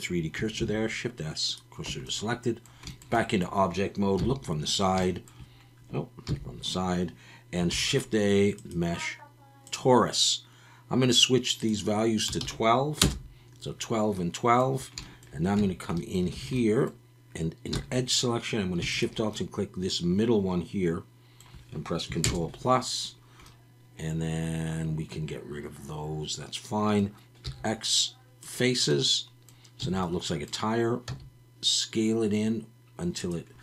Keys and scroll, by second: 0.6 shift+s, 1.9 Tab, 4.2 KP_3, 6.3 KP_3, 7.7 shift+a, 15.6 Tab, 16.3 alt+a, 17.7 2, 22.2 ctrl+KP_Add, 27.4 x, 29.8 a, 31.1 s.